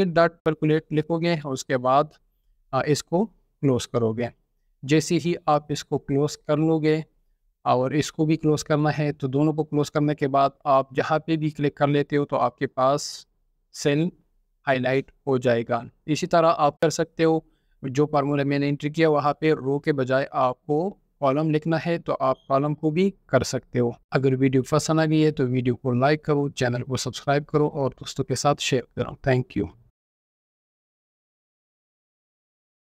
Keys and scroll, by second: 0.0-0.7 typing, 1.1 Tab, 2.1 typing, 23.5 scroll down 1, 24.5 typing, 25.2 scroll down 1.